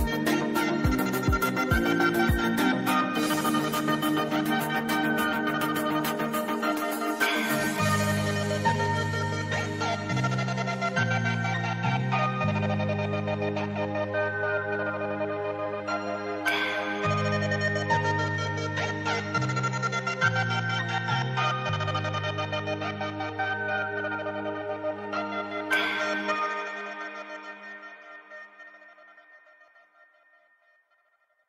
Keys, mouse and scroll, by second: 1.7 scroll down 1, 2.4 alt+scroll down 1, 2.8 click, 2.9 space, 3.3-5.7 drag, 7.7-10.6 drag, 12.5-12.9 drag.